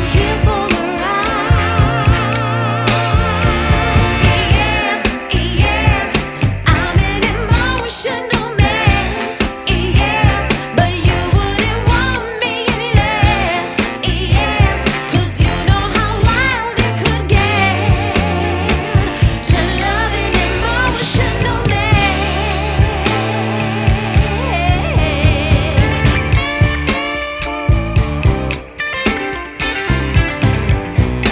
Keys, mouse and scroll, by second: 1.7 Tab, 2.6-3.2 typing, 4.5-7.0 typing, 9.1 Tab, 10.0 click, 17.1 click, 19.3 click, 21.5 click, 23.1 click, 25.6 click, 28.8 click.